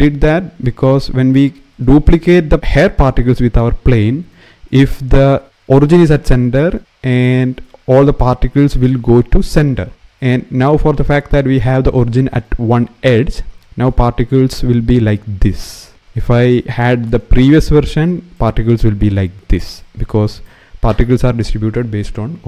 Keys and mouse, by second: 4.8-6.0 middle drag, 10.5 shift+middle click, 16.0 shift+middle click, 18.1 middle click.